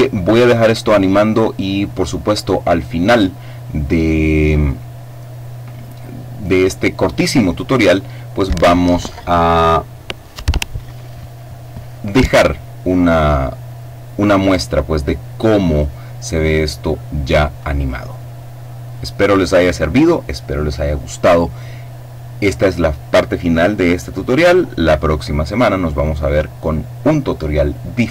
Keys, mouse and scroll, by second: 2.4 click.